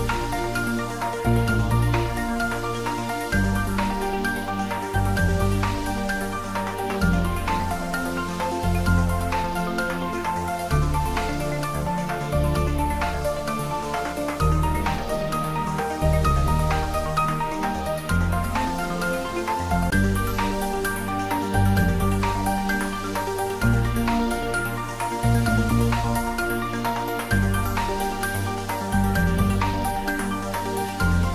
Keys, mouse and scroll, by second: 1.2 shift+d, 1.7 x, 5.0 click, 7.7 scroll up 1, 8.9-10.7 scroll down 1, 11.2 shift+d, 11.6 x, 20.0 click, 20.4 scroll down 1, 21.0-22.7 middle drag, 22.7-26.1 middle drag, 26.1-26.6 scroll up 2, 26.6-27.0 scroll down 2, 27.0 middle click, 27.7-28.1 scroll up 2, 28.4-28.8 scroll up 2, 28.8-30.2 scroll down 2, 30.2 click, 31.1 middle click.